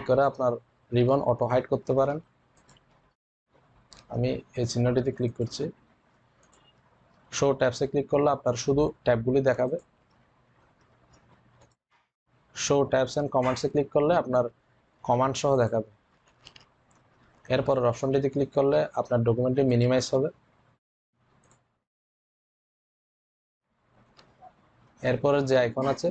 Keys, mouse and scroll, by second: 2.4 click, 5.0 click, 9.4 click, 15.4 click, 19.5 click, 19.6 click.